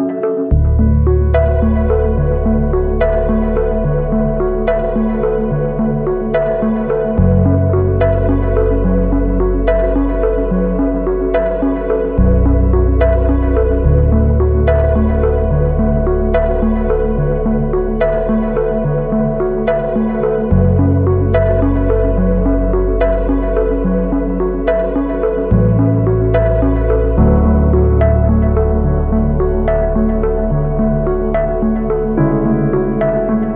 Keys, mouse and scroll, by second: 32.4-33.5 scroll up 1, 33.5 scroll up 1.